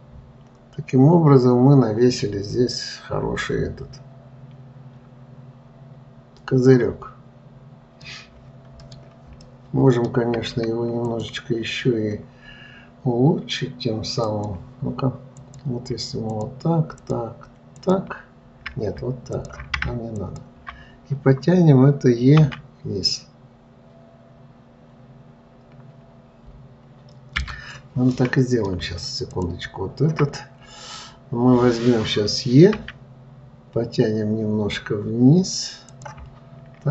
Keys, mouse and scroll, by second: 9.1-11.4 middle drag, 11.4 click, 14.6-15.9 drag, 16.7 shift+click, 17.4 shift+click, 18.0 shift+click, 19.6 shift+click, 20.5 ctrl+click, 22.8 e, 28.5-29.7 middle drag, 29.7 shift+click, 30.7-33.1 middle drag, 33.1 e.